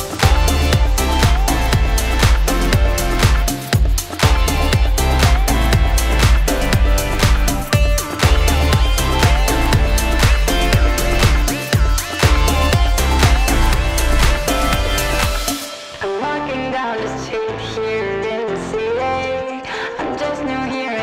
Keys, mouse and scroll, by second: 1.0 click, 1.3 click, 3.1 click, 3.9 alt+click, 5.6 click, 6.6 click, 10.2 click, 16.8 click, 17.9 click.